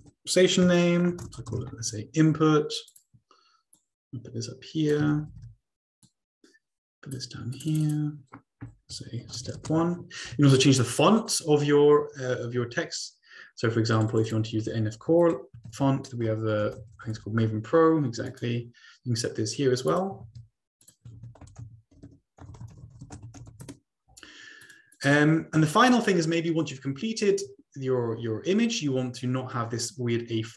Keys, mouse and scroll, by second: 1.6 typing, 2.9 click, 3.8-5.3 drag, 5.3 ctrl+c, 5.4 ctrl+v, 6.1-7.3 drag, 7.6 click, 7.9 click, 9.4-9.7 typing, 10.6 ctrl+a, 11.2-12.9 ctrl+drag, 14.0 click, 14.1 click, 14.4 click, 15.4 ctrl+click, 15.8 ctrl+a, 16.7-17.2 typing, 18.2-19.2 drag, 19.8 click, 20.2 ctrl+a, 20.8 click, 21.2 ctrl+a, 22.0 ctrl+a, 22.5-27.1 typing, 24.6 click, 25.6 ctrl+scroll down 2, 26.3 middle click, 26.6-27.8 ctrl+scroll down 1, 29.6-30.5 scroll down 2.